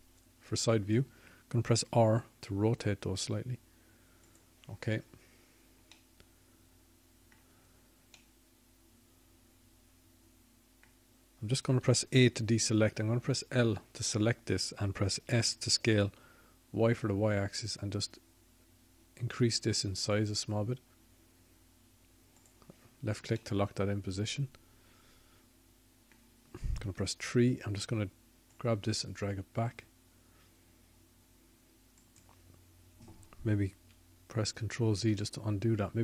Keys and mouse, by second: 5.0 KP_3, 7.8 r, 11.9 middle click, 18.0 a, 19.0 l, 21.3 s, 29.5 middle click, 29.9 middle click, 32.8 KP_3.